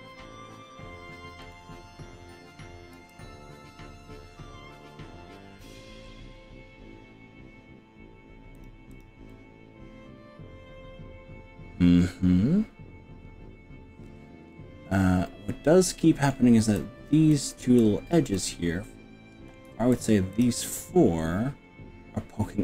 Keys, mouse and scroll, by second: 1.5 click, 2.9 g, 3.5-3.9 scroll up 3, 4.1-4.5 scroll down 2, 5.7 scroll up 1, 6.1-7.1 scroll down 6, 8.6 click, 8.9 click, 9.3-16.3 middle drag, 16.8-17.1 drag, 17.3 middle click, 17.8-18.3 drag, 18.3 middle click, 18.9-19.2 middle drag, 19.3 middle drag, 19.9 shift+drag, 20.3 shift+click, 20.8-22.6 middle drag.